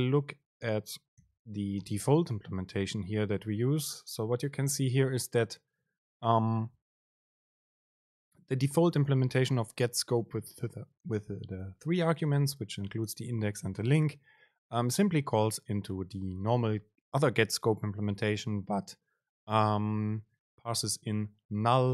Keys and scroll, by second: 1.5 super+b.